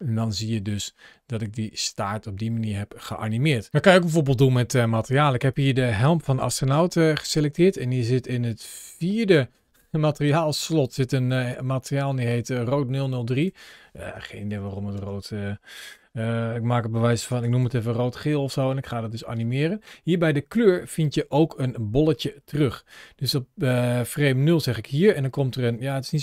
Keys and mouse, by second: 5.3 click, 7.3 ctrl+shift+a, 12.8-19.2 drag, 14.1 BackSpace, 14.3 BackSpace, 17.6 e, 24.4 click.